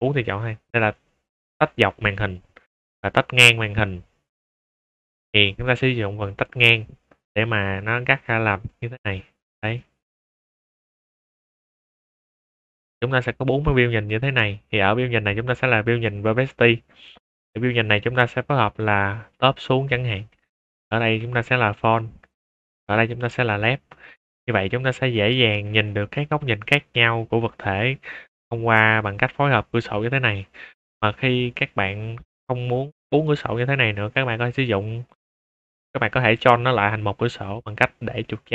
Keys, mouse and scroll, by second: 6.2 click, 8.2 click, 10.8 right click, 11.5 click, 12.5 click, 14.7 click, 15.3-16.0 middle drag, 16.2 shift+middle drag, 17.3 click, 18.1 `, 20.1 scroll up 2, 20.4 shift+middle drag, 20.9 click, 21.1 `, 22.6 click, 22.9 `, 24.8 middle click, 24.8 scroll up 2, 25.1-25.6 middle drag, 25.8 shift+middle drag, 28.4 shift+middle drag, 30.7 shift+middle drag, 31.4-31.7 middle drag.